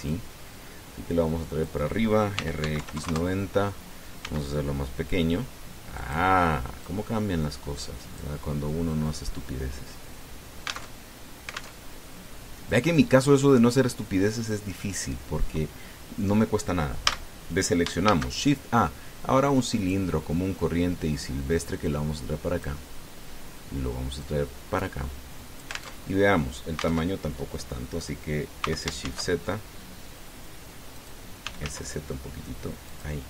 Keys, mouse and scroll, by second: 0.9-2.6 drag, 3.1 r, 3.4 x, 3.6 KP_9, 3.8 KP_0, 3.9 KP_Enter, 5.0 s, 6.8 click, 7.7-9.2 drag, 11.7 alt+Tab, 12.6 alt+Tab, 13.5-16.0 drag, 17.8 a, 18.8 shift+a, 20.6 click, 22.4-23.6 drag, 25.0-26.8 drag, 26.8 alt+Tab, 27.9 alt+Tab, 29.4 s, 29.8 shift+z, 31.8 click, 32.2 s, 32.4 z.